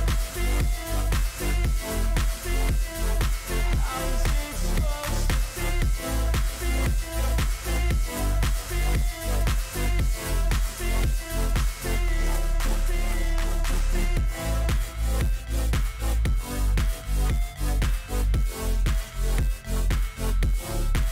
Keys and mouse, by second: 1.1 click, 1.9 click, 5.2-6.6 drag, 10.6-11.9 drag, 13.2 click, 14.3 click, 16.0 click, 16.2 right click, 18.5 alt+shift+click, 18.8 shift+click.